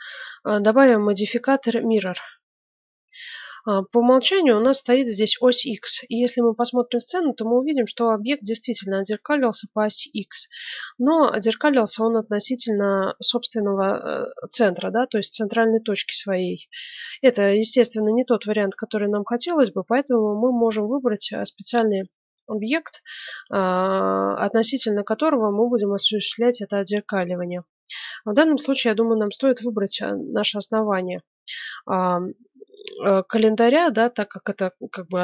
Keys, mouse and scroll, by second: 0.9-2.4 drag, 29.2-30.9 right drag.